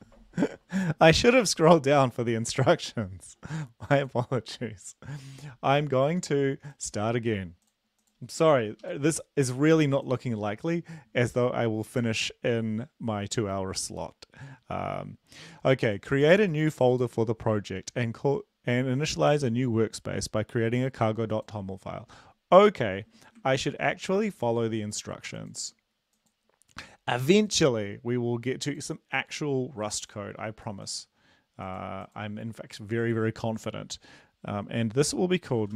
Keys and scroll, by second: 24.5 ctrl+Escape, 24.5 ctrl+`.